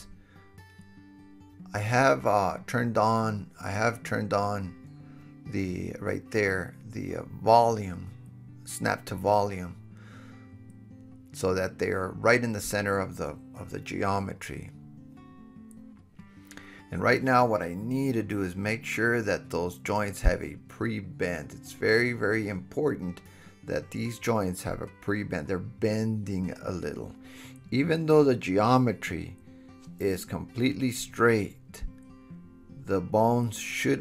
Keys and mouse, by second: 0.5 drag, 1.0 g, 1.3 drag, 1.7 g, 2.2 drag, 2.6 g, 3.0-9.1 drag, 3.2-3.9 middle drag, 3.2-3.9 right drag, 3.4 g, 4.2-5.2 middle drag, 4.2-5.2 right drag, 4.4 g, 5.5-6.8 middle drag, 5.5-6.8 right drag, 5.7 g, 7.7 KP_1, 8.6-9.6 middle drag, 8.6-9.1 right drag, 9.1 g, 9.9 KP_7, 10.0-13.0 drag, 10.5 g, 12.2 KP_1, 13.1 super+KP_Add, 13.2 super+KP_Add, 13.3 super+KP_Add, 13.5 super+KP_Add, 13.6 super+KP_Add, 15.9 alt+h, 16.9-18.6 shift+drag, 16.9 shift+h, 19.1 KP_7, 19.5-20.4 middle drag, 19.5 g, 20.4 click, 21.0 KP_1, 21.4-22.4 middle drag, 21.9 g, 22.4 click, 22.8-23.7 middle drag, 23.0 g, 23.7 drag, 24.4 g, 25.0 click, 25.4 g, 25.8 click, 26.4 g, 26.8-34.0 drag, 29.0 alt+h, 29.6 middle click, 29.6 right click, 29.9 KP_7, 30.5 g, 31.5 g, 32.9 g, 33.7 middle click, 33.7 right click, 33.9 g.